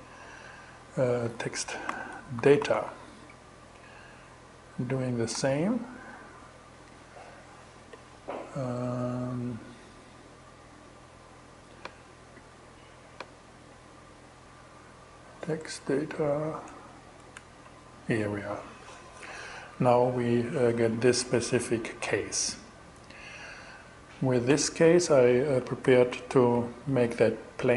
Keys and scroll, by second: 0.5-2.7 typing, 4.8 shift+Return, 15.0 BackSpace, 16.1 BackSpace, 16.6 shift+BackSpace, 16.8 shift+Return, 25.3 shift+m.